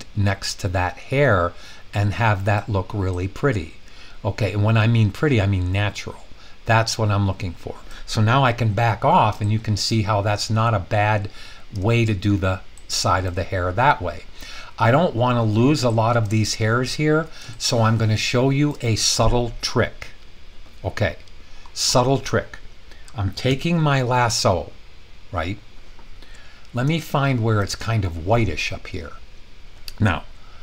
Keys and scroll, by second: 23.5 |.